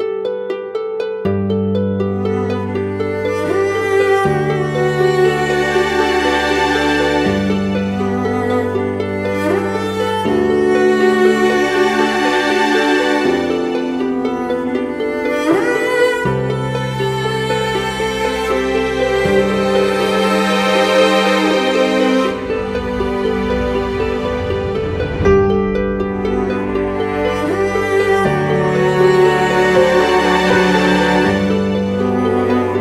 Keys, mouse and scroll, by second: 10.7 ctrl+t, 11.5 alt+shift+click, 12.0 ctrl+h, 14.1 double click, 31.0-31.6 typing.